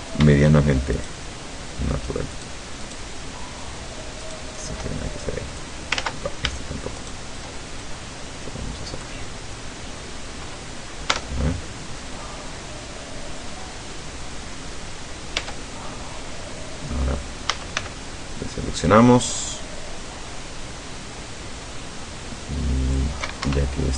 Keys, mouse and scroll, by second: 1.1 shift+right click, 2.4 shift+right click, 2.9 shift+right click, 4.3 shift+right click, 5.3 shift+click, 6.0 ctrl+z, 7.0 shift+right click, 7.9-9.3 shift+drag, 9.3-10.2 middle drag, 11.2 Tab, 12.0-14.0 middle drag, 14.5-15.0 scroll up 3, 15.0 scroll down 2, 15.5 Tab, 17.6 a, 17.8 c, 19.0-23.3 drag, 23.6 Escape.